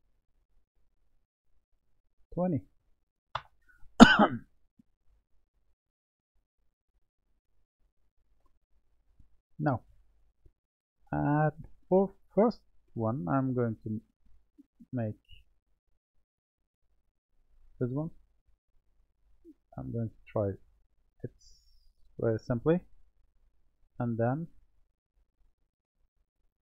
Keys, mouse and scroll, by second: 2.1-4.7 drag, 5.1-9.3 middle drag, 9.3 Tab, 11.8-14.8 drag, 15.0-16.7 middle drag, 16.7 click, 19.0 click, 20.9 s, 22.8-23.9 middle drag, 26.1 click.